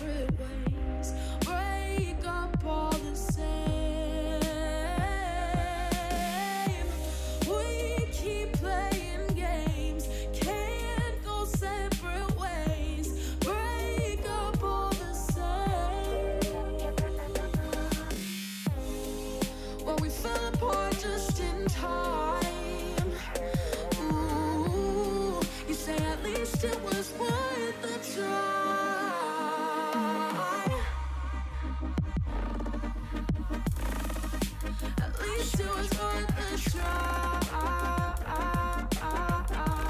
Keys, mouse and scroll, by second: 0.7 alt+k, 1.3 alt+h, 1.7 click, 3.1 h, 3.8 click, 4.3 ctrl+l, 4.6 x, 5.2-6.2 drag, 5.2 middle click, 6.2 3, 6.8 x, 7.1-9.0 middle drag, 9.0-9.9 scroll up 2, 9.9-10.9 scroll down 1, 10.9-11.3 scroll down 1, 12.4-13.0 scroll down 1, 13.0-14.0 middle drag, 14.0 l, 14.6 l, 15.0 p, 15.9 click, 17.0 Tab, 17.9 Tab, 18.4 alt+h, 19.1 ctrl+i, 19.7 KP_1, 20.0 alt+z, 20.2 shift+middle drag, 20.5 scroll up 1, 20.7-21.6 shift+middle drag, 21.6 ,, 22.4 g, 24.9 g, 25.8 1, 27.0 c, 28.5 x, 29.3 scroll down 4, 29.5 middle click, 30.0 alt+z, 30.2 click, 30.6-31.7 middle drag, 31.7 KP_3, 32.3-32.6 shift+middle drag, 32.6 click, 33.2 Tab, 33.7 shift+a, 35.6 Tab, 35.9 g, 36.8 KP_1, 37.1 s, 38.2 g, 38.7 shift+middle click, 38.8-39.6 scroll up 6, 39.1 shift+middle click, 39.6 s.